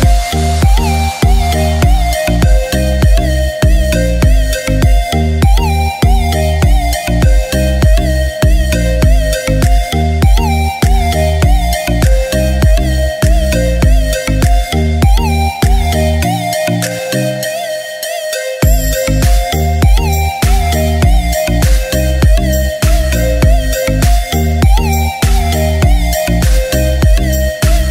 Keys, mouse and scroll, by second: 2.1 shift+click, 2.1-2.5 typing, 4.6-8.6 drag, 8.6 right click, 12.5 click, 19.1 click, 21.1-22.1 typing, 23.8 typing, 23.9-26.3 drag, 26.3-26.7 scroll up 1.